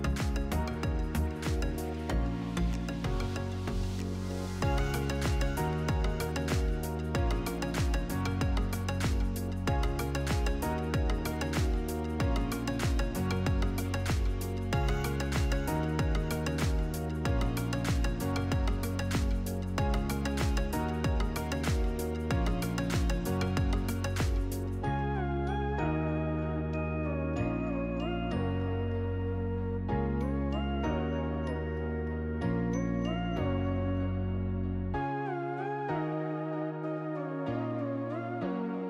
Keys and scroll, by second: 3.9 s, 4.4 r, 9.1 ctrl+v, 12.6 2, 12.9 Return, 15.2 1, 15.5 Return, 23.2 ctrl+d, 26.6 5, 27.0 Return.